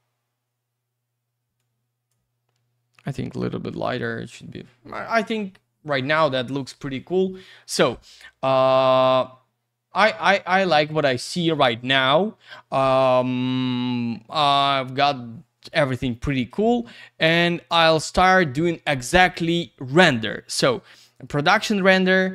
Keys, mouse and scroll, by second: 1.6 click, 3.3 click, 3.3 click, 3.9 click, 4.0 click, 8.7-9.3 scroll up 1, 9.3-10.6 scroll down 1, 10.6 click, 17.8 click, 17.9 click.